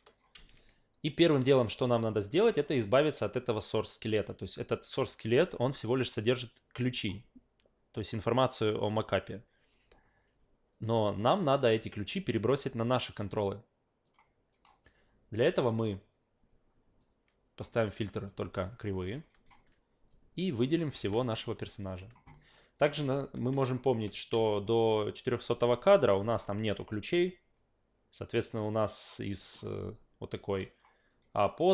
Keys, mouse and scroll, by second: 2.0 alt+right click, 2.5 alt+middle click, 3.4 click, 10.7 alt+right click, 11.2 alt+middle click, 13.1 click, 14.0 click, 17.0-17.6 drag, 18.2 click, 19.0 alt+right click, 19.3 alt+right click, 20.1-20.6 drag, 21.0 f, 21.7 alt+right click, 22.4 alt+middle click, 22.7 alt+right click, 23.0 alt+click, 24.7-25.5 drag, 25.7 alt+middle click, 26.0 alt+right click, 26.2 alt+click, 26.6 alt+middle click, 27.5-29.0 drag, 29.4 alt+middle click, 29.7-30.8 alt+drag, 31.1 alt+right click, 31.3 alt+click.